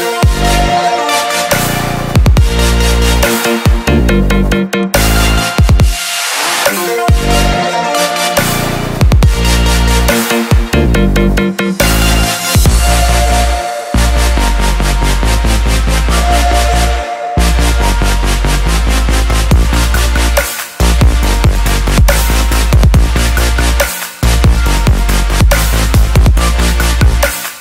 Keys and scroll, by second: 10.5 ctrl+t.